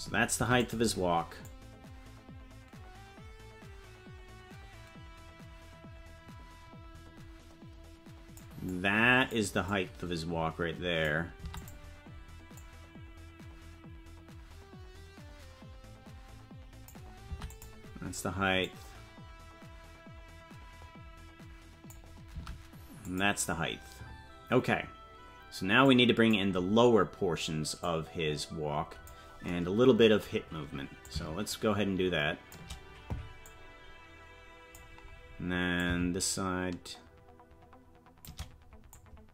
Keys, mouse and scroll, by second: 0.3 i, 1.4-8.5 drag, 2.0 i, 8.6 click, 9.6-11.1 drag, 11.4 i, 12.5-16.9 drag, 17.2 i, 18.6-21.9 drag, 22.3 i, 25.8 click, 27.8-29.1 drag, 31.0-32.6 drag, 33.4-34.8 drag, 35.7-38.3 drag, 38.9-39.3 drag.